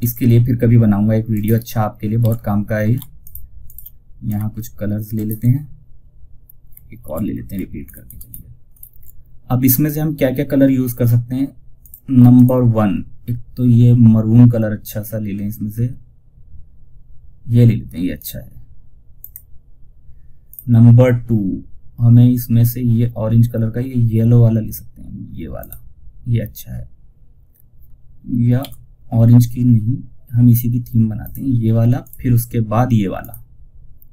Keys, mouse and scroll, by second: 0.6 ctrl+right click, 1.5 ctrl+r, 2.5 shift+click, 6.3 ctrl+r, 7.1 ctrl+scroll up 1, 10.8 typing, 11.1 click, 17.5 click, 24.9 click, 27.5 click, 27.9 z, 30.5 click.